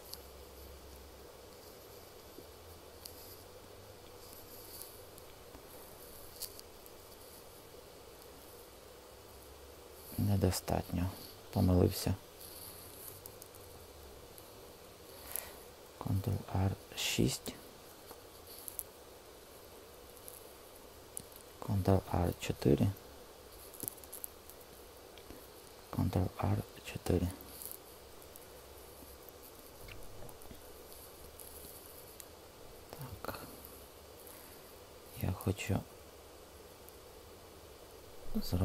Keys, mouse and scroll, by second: 12.7-14.8 super+z, 16.2 ctrl+r, 19.4 Escape, 21.9 ctrl+r, 24.0 Return, 26.3 ctrl+r, 28.7 Escape, 35.7 w.